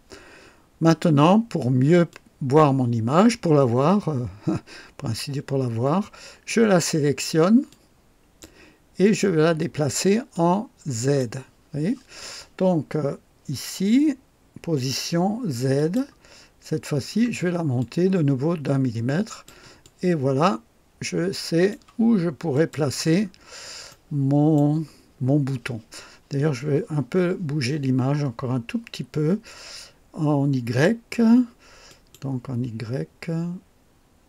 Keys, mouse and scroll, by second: 0.5 scroll up 2, 2.0-6.6 drag, 7.6 click, 9.0 click, 10.3 click, 15.7 click, 16.7 scroll up 1, 17.7-19.6 drag, 19.8-21.8 drag, 22.5 click, 23.2-23.5 scroll up 1, 23.8-24.7 right drag, 31.8 click, 33.2 scroll down 2, 33.6-34.1 scroll up 4.